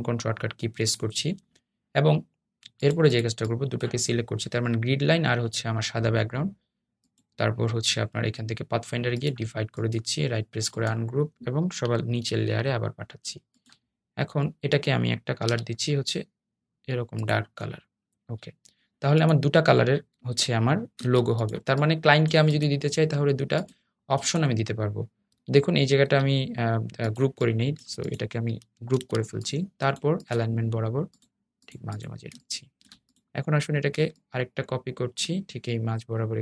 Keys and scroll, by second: 15.8 i.